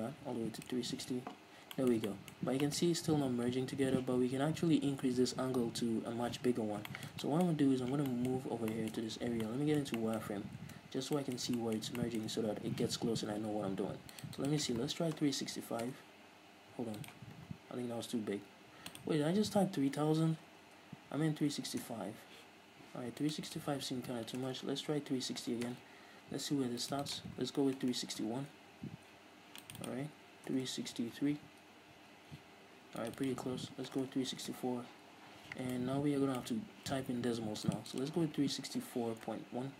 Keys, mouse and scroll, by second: 1.7-2.0 scroll up 2, 2.0-14.4 shift+middle drag, 2.6 scroll up 2, 6.8 scroll up 2, 7.7-8.3 scroll up 2, 8.3-8.9 scroll up 2, 9.4 z, 10.5-11.1 scroll up 2, 11.1-11.4 scroll down 2, 14.4-28.2 drag, 16.2 Return, 20.9 BackSpace, 22.1 Return, 24.8 BackSpace, 26.1 Return, 28.2 BackSpace, 29.1 Return, 29.9 click, 30.9 BackSpace, 32.3 Return, 33.2 click, 34.3 BackSpace, 34.9 Return, 36.0-37.9 shift+middle drag, 37.9-39.7 drag.